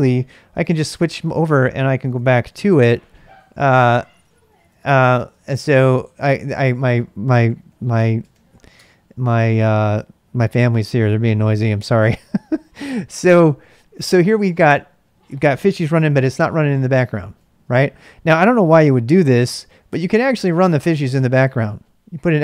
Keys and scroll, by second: 7.2-8.8 typing, 15.8 ctrl+a, 16.0 ctrl+a, 17.4 ctrl+a, 18.8 ctrl+c, 19.9 ctrl+[, 20.0-21.1 typing.